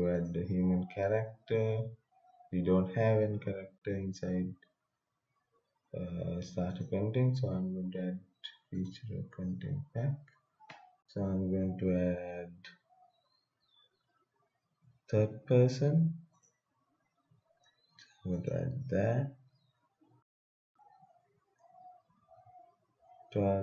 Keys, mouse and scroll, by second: 0.1 click, 6.7 click, 16.3 click.